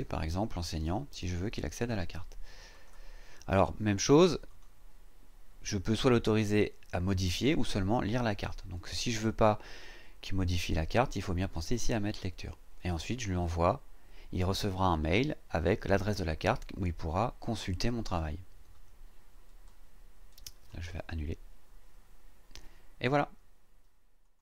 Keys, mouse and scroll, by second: 0.4-2.2 typing, 2.7 click, 4.5 click, 11.5 click, 20.6 click.